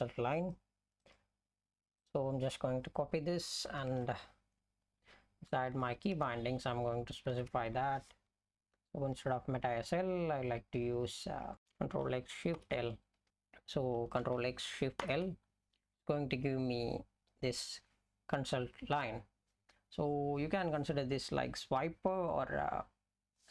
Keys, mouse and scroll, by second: 4.1 F11, 5.8 Left, 6.1 Return, 7.3 ctrl+y, 8.1-9.4 Left, 10.7 Right, 11.0 Right, 11.5 BackSpace, 12.6 l, 13.1 Right, 13.3 ctrl+e.